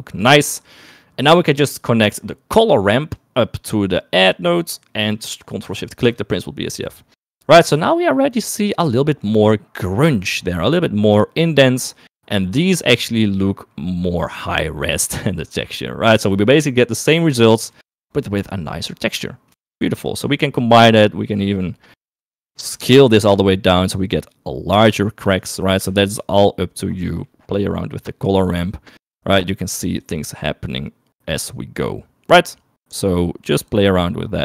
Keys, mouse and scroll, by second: 1.1 middle click, 1.6 middle click, 2.3 middle click, 3.5-4.7 drag, 5.2 middle click, 6.4 ctrl+shift+click, 9.8 shift+middle click, 17.2 shift+middle click, 18.3 shift+middle click, 20.8 shift+middle click, 21.8 middle click, 22.1 middle click, 22.3 middle click, 23.1 click, 25.9 click, 27.8 middle click, 28.8-30.2 drag, 30.8-34.4 drag.